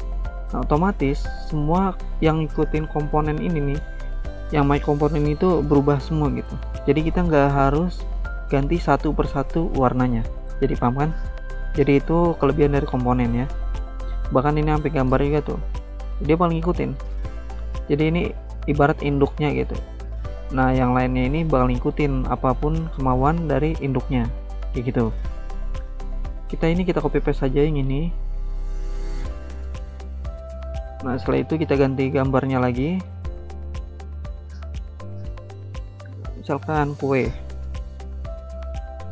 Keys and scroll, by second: 13.0 ctrl+z, 17.3 ctrl+z, 27.2 ctrl+c, 27.5 ctrl+v.